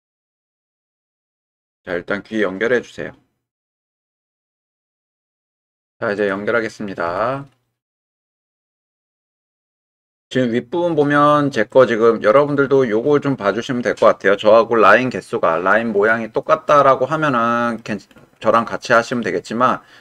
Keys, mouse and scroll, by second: 2.4-3.5 middle drag, 6.2 click, 7.1 w, 8.1-10.6 middle drag, 10.6 click, 10.8 middle click, 12.4 middle click, 16.7-17.8 middle drag, 18.6 shift+middle click, 19.1-20.0 middle drag.